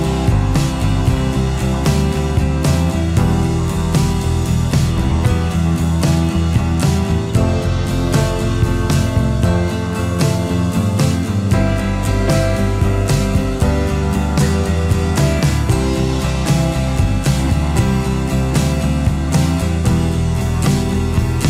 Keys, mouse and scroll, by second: 1.5 space, 6.5 alt+scroll down 1, 6.7 space.